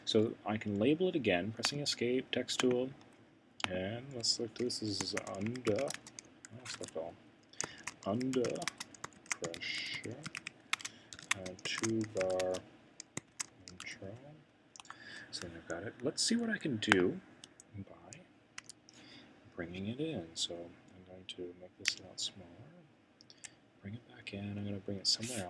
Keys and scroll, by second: 4.8-9.6 typing, 10.9-13.8 typing, 14.8 Return, 15.2 typing.